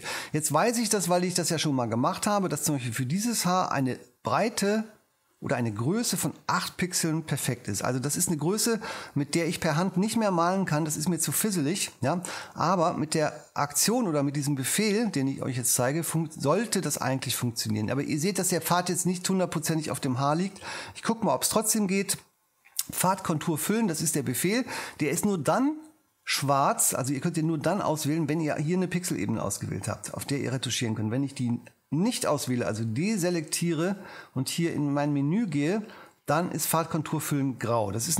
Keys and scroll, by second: 6.6 8, 13.9 Home.